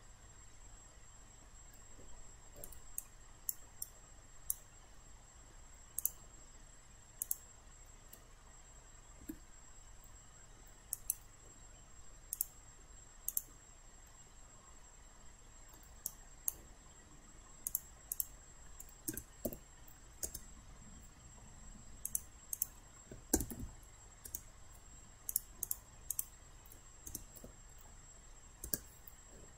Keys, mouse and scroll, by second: 3.1 alt+click, 3.9 alt+right click, 5.0 alt+middle click, 6.0 click, 9.3 Delete, 10.9 click, 14.1-15.9 middle drag, 16.1 alt+right click, 17.7 click, 19.1 BackSpace, 19.5 BackSpace, 20.3 Return, 22.1 click, 23.4 typing, 24.3 Return, 25.4 click, 27.1 BackSpace, 27.4 BackSpace, 28.7 Return.